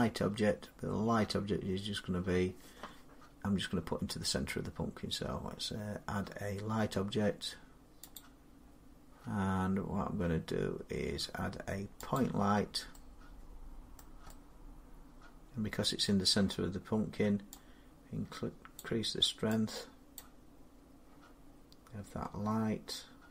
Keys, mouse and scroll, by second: 2.1-3.1 drag, 8.0-13.8 drag, 13.8 middle click, 15.8 middle click, 18.6 click, 20.0 click.